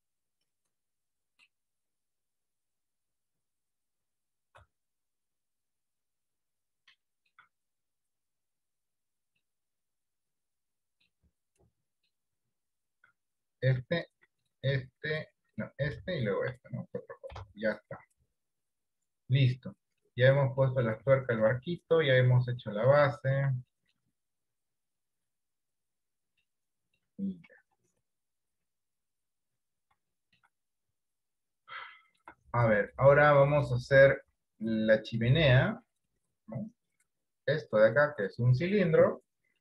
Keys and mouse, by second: 2.1-3.8 drag, 4.6 r, 7.2 middle click, 8.2-9.2 drag, 9.5-11.2 middle drag, 11.7 middle click, 15.5-17.5 right drag, 17.5 ctrl+j, 19.2 middle click, 20.1 middle click, 20.7 middle click, 21.3 shift+middle click, 21.7 middle click, 22.7 middle click, 23.2 shift+middle click, 23.7 middle click, 24.9 click, 26.5 shift+middle click, 27.8 KP_3, 28.3 KP_1, 28.8 KP_3, 30.3 shift+middle click, 32.0 shift+middle click, 32.9 shift+middle click, 35.5 click.